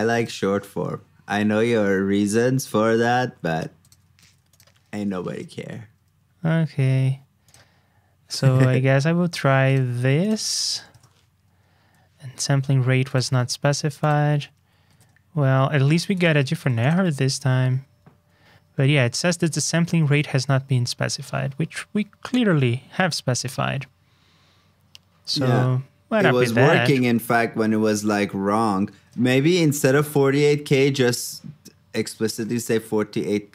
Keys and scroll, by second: 2.4 super+z, 4.2 super+c, 4.8 super+v, 10.0 super+c, 10.5 super+v, 16.5 super+c, 17.0 super+v, 20.1 super+Tab, 29.0 super+Tab.